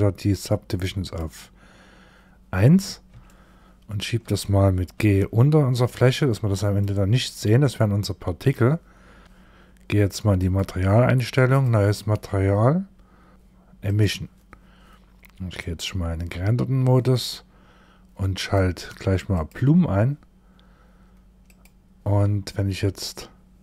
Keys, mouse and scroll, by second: 0.5 click, 2.7 shift+middle click, 4.4 g, 5.6 middle click, 9.8 click, 11.0 click, 13.0 click, 15.2 click, 17.8 click, 18.8 click, 20.9 click, 23.5 click.